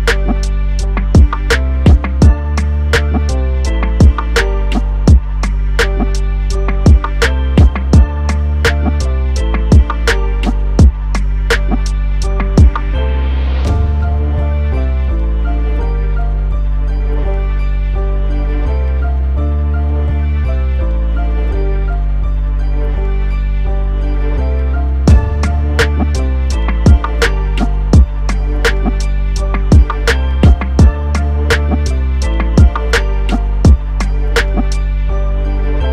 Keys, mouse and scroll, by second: 1.7 click, 2.7 click, 3.8 middle click, 8.8 click, 18.8 click, 19.9 click, 20.3 right click, 21.9 click, 30.1 click, 31.6 click, 34.8 click.